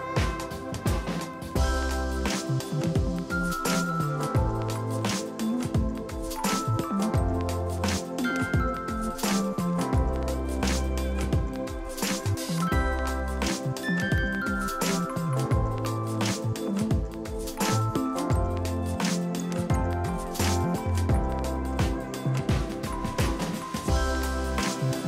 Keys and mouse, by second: 0.9 y, 1.0 click, 1.3 ctrl+1, 1.4 click, 1.6 ctrl+click, 1.7 right click, 2.0 click, 2.4 ctrl+shift+x, 2.5 click, 3.9 ctrl+1, 4.0 click, 4.5 ctrl+q, 4.7 click, 5.4 shift+click, 5.8 Escape, 6.0 click, 8.2 ctrl+1, 8.3 click, 12.6 ctrl+d, 12.8 click, 13.0 ctrl+d, 13.2 click, 16.5 Escape, 16.7 ctrl+1, 16.7 Escape, 16.8 click, 16.9 right click, 17.2 click, 17.5-19.1 typing, 18.6 click, 19.2 Return, 19.4 ctrl+1, 19.5 click, 19.8 Delete, 20.3 click, 20.7 ctrl+shift+x, 20.9 click, 21.4 ctrl+1, 21.5 click, 22.7 ctrl+click.